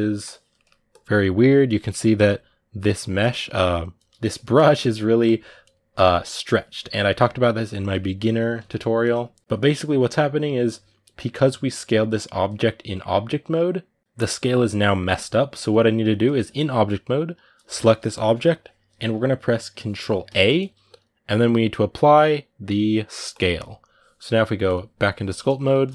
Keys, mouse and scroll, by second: 0.0 click, 0.3 ctrl+middle click, 0.7 click, 1.5-3.8 shift+middle drag, 3.8 f, 5.0-7.6 drag, 7.6 middle click, 8.3 ctrl+z, 8.8 ctrl+z, 9.3 ctrl+z, 16.3-23.2 shift+middle drag, 24.4 click, 25.2 shift+middle click.